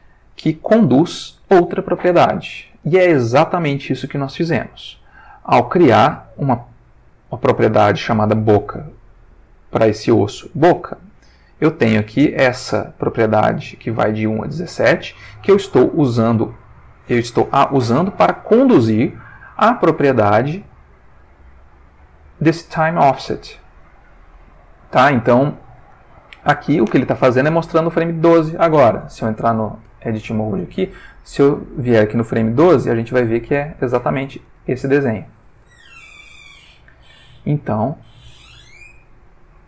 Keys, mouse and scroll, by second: 5.0 click, 11.4-15.3 drag, 19.9 click, 29.8 Tab, 32.0 click, 34.0 Tab, 37.0-39.6 drag.